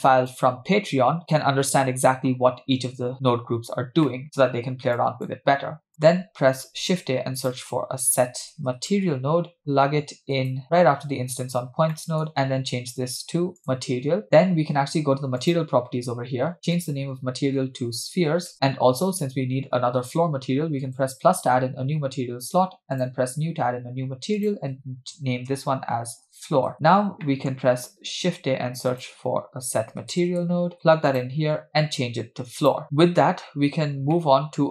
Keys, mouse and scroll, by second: 4.1 middle click, 5.3 drag, 5.9 click, 6.6 shift+a, 10.6 click, 11.5 scroll up 2, 11.9 middle click, 12.3-13.8 drag, 15.4 click, 16.8-18.5 drag, 18.5 e, 20.8 click, 23.0 drag, 24.4-26.7 drag, 26.4 o, 26.8-27.3 scroll down 2, 27.3-27.6 middle drag, 28.2 shift+a, 31.7-32.8 drag, 33.2-33.6 scroll down 2, 34.1 scroll down 2, 34.1 middle click.